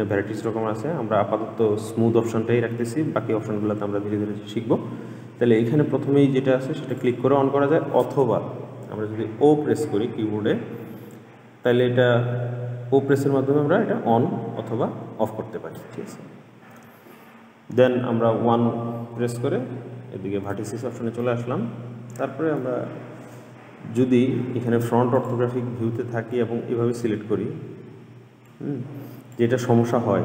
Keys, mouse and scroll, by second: 7.1 click, 9.9 o, 13.6 o, 19.3 1, 21.4-24.4 middle drag, 25.3 click, 26.5 click, 28.6 click, 30.1-30.2 middle drag.